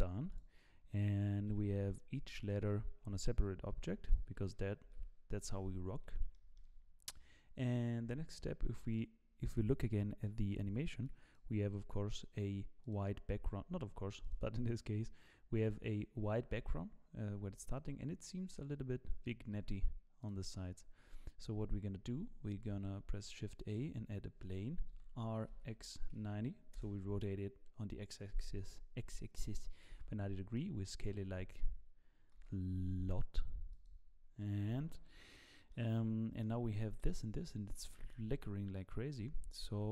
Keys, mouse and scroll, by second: 0.3 click, 1.5 g, 2.4 click, 3.0 g, 4.0 click, 4.8 g, 6.0 scroll down 2, 6.3 shift+middle click, 22.5 shift+a, 24.9 r, 28.9 scroll down 2, 29.8 scroll down 4, 29.9 s, 31.6-32.3 scroll down 2, 32.3 s, 35.1-35.4 scroll up 1, 35.7 middle click, 36.6 scroll up 4, 37.0 shift+middle click, 37.4-37.9 scroll up 2, 37.9 shift+middle click, 38.4-38.7 scroll up 2, 39.7 g.